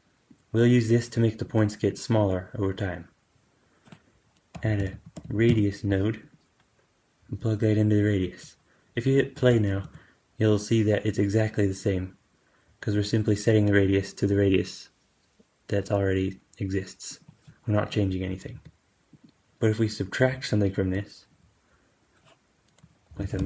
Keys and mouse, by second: 0.2-6.2 drag, 4.4 q, 7.1-17.1 drag, 9.2 space, 9.7 g, 18.4 g, 19.1 shift+Left, 19.1 alt+g, 19.1-23.4 drag, 19.1 space, 22.7 q.